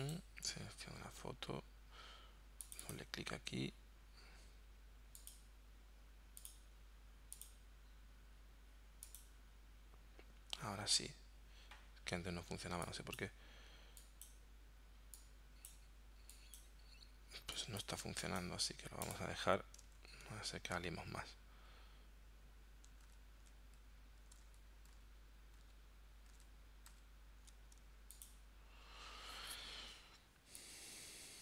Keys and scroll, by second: 20.0 super+z, 23.1 super+z, 24.5 super+z, 25.6 super+z, 26.3 super+z, 27.0 super+z.